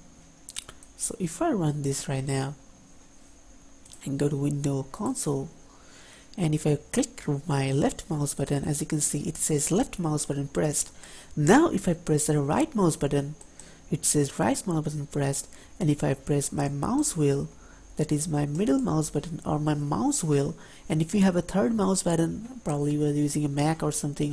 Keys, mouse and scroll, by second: 8.6 click, 13.6 right click, 16.8 middle click.